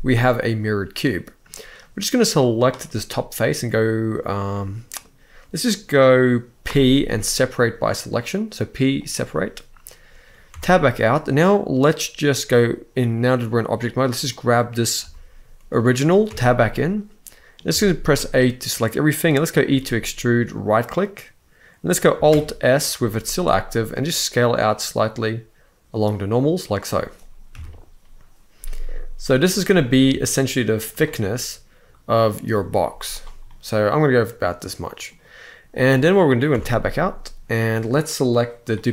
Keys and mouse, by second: 1.6 click, 2.6 middle click, 4.2 middle click, 6.4 p, 10.2 Tab, 13.9-14.7 drag, 14.7 g, 15.4-15.7 right drag, 16.0 Tab, 16.7 middle click, 17.4 a, 17.8 middle click, 19.4 e, 20.2 right click, 22.9 alt+s, 26.4 click, 27.2 KP_1, 29.4 alt+s, 30.5 shift+right click, 31.0 middle click, 32.6 z, 33.2-34.8 middle drag, 35.6 middle click, 36.2 Tab.